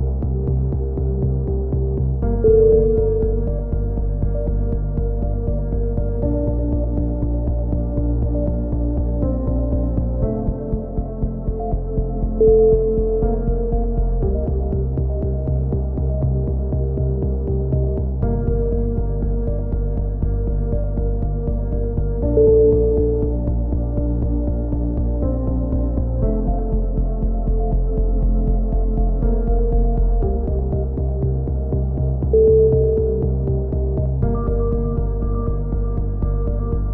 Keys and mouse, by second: 1.0 click, 4.0 a, 4.1 z, 4.3 middle click, 4.6 KP_3, 5.0 z, 6.6-9.6 middle drag, 11.2 a, 11.9 Tab, 11.9 z, 12.1 middle click, 12.5 z, 13.2 Tab, 14.3 b, 16.3 click, 17.9 a, 18.4 click, 19.9 b, 21.4 click, 22.3 a, 22.6 z, 23.1 z, 24.8 z, 25.4 z, 28.6 z, 29.0 z, 29.4 z, 29.6 middle click, 30.4 middle click, 31.3-33.3 drag, 33.3 alt+m, 33.3 right click, 34.4 right click, 35.0 click, 35.1 alt+m, 35.1 right click, 35.8 a, 36.0 click.